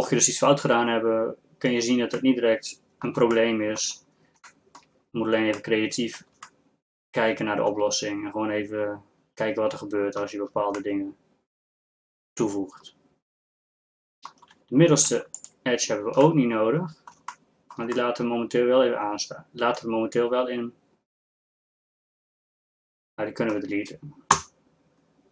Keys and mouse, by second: 2.5 middle click, 3.6 middle click, 4.0 middle click, 6.0-7.0 middle drag, 7.7 middle click, 10.4 middle click, 15.4-17.5 middle drag, 23.0 middle click, 24.4 x.